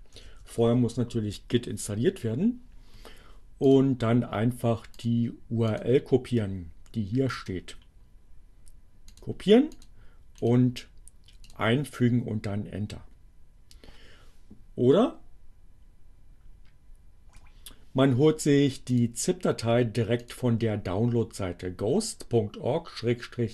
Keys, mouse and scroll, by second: 0.0-0.5 typing, 3.7 click, 4.9 click, 7.3 right click, 9.2 click, 9.8 click, 10.4 right click, 11.4 click, 14.9 BackSpace, 18.7 click, 20.2 click.